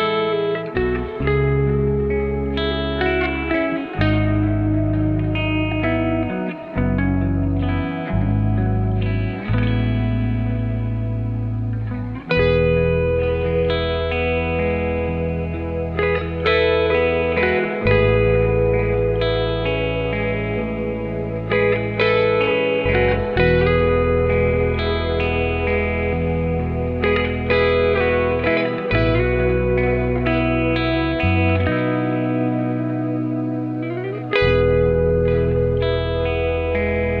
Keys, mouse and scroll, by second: 1.9-2.4 scroll down 10, 2.4 click, 2.9-6.1 scroll up 5, 6.1 Tab, 7.1 click, 9.1 click, 9.5-10.5 scroll up 3, 10.8-12.0 drag, 13.0-13.6 scroll down 3, 13.6-14.7 drag, 15.9-16.8 scroll down 5, 17.0-18.5 drag, 18.5 g, 21.0 click, 22.9 shift+a, 24.4 click, 25.1-26.1 scroll up 3, 26.2-32.4 drag, 32.9-34.3 scroll down 1, 34.3-37.2 scroll up 3.